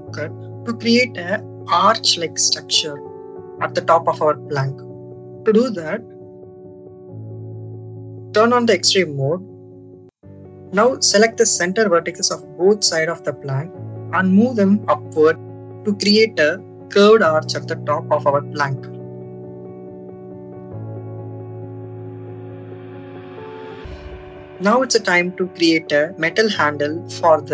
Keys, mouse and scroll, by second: 2.7 click, 4.1 click, 6.0 click, 7.0 shift+middle click, 9.3 click, 10.3 click, 12.8-19.1 drag, 21.5 click, 23.4 Tab, 24.6 click, 25.2-26.3 drag, 27.0 click.